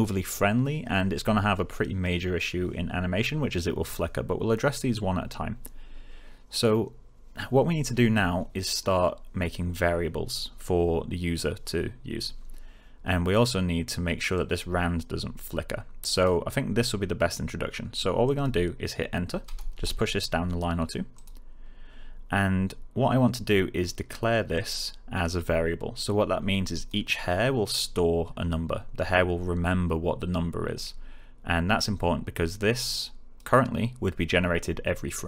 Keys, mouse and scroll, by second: 14.3-16.5 click, 19.4 Return, 21.1 click, 24.5-25.4 click, 32.8-33.4 click.